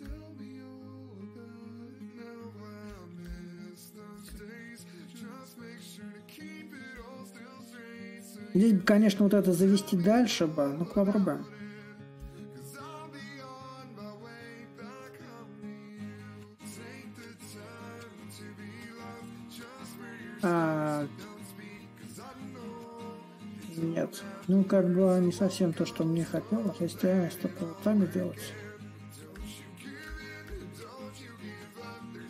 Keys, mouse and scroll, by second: 1.1-6.2 drag, 6.6-11.7 drag, 11.9-17.0 drag, 18.5-23.6 drag, 23.9-28.9 drag, 29.1-32.2 drag.